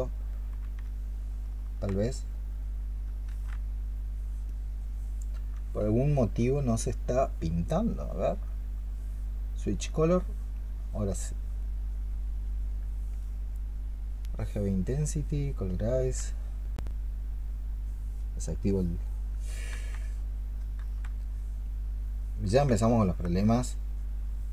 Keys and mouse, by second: 0.7 s, 2.9 s, 3.6 ctrl+z, 15.8 ctrl+click, 20.0 ctrl+z, 20.6 ctrl+z, 22.7 alt+click.